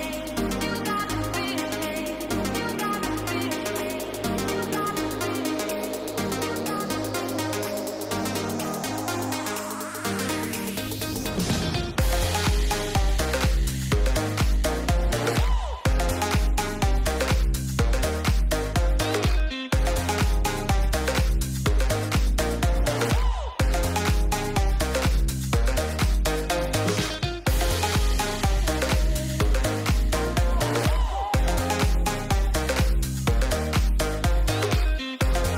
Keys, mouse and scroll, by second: 0.5 KP_0, 1.2 Tab, 2.9 shift+middle drag, 5.1 shift+middle click, 6.0 n, 7.3 click, 8.4-9.4 drag, 10.9 n, 11.2 ctrl+s, 12.5 click, 15.8 click, 18.0 click, 19.3 click, 19.7 click, 19.9 click, 20.9 click, 23.6 shift+middle drag, 24.5 shift+middle click, 26.3-27.6 drag, 27.7 click, 29.8 shift+middle drag, 30.5 shift+middle click, 32.9 shift+middle click, 33.5 shift+middle click, 33.9 click, 34.1 Tab, 35.0 Tab.